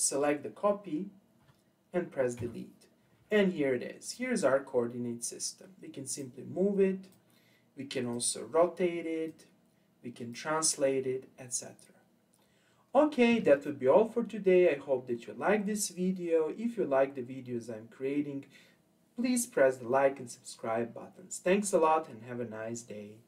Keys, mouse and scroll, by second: 2.4 Delete, 4.0 click, 6.2 click, 8.1-9.4 drag, 12.4-15.7 scroll down 2.